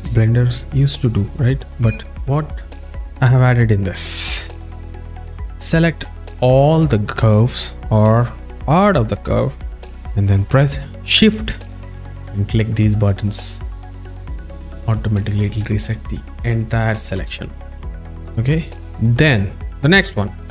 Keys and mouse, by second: 4.9-5.9 alt+shift+middle drag, 5.9 click, 8.3 click, 8.5 click, 14.9 shift+click, 18.1 z, 20.1-20.5 alt+shift+middle drag.